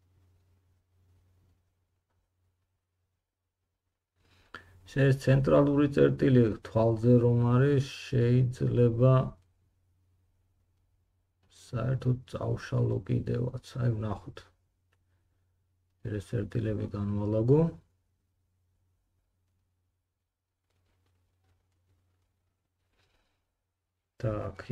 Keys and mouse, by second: 3.6 g, 7.1 g, 9.6 click, 11.3 g, 17.3 g, 19.5 click, 19.7 g.